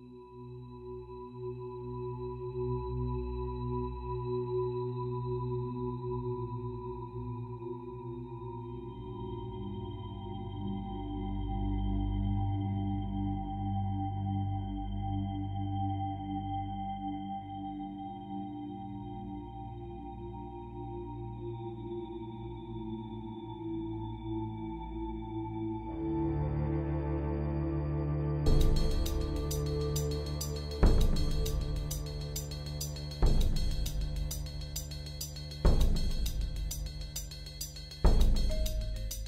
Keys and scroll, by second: 2.5 ctrl+z, 11.3 [, 14.2 typing, 16.6 ctrl+z, 17.9 i, 20.3 b, 31.8 ctrl+z.